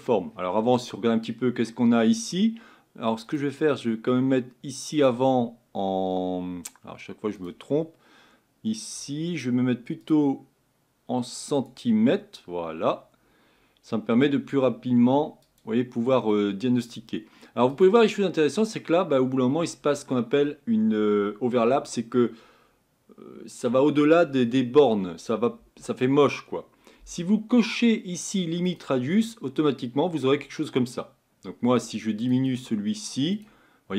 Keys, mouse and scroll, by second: 11.6-28.8 drag, 31.8-33.9 drag.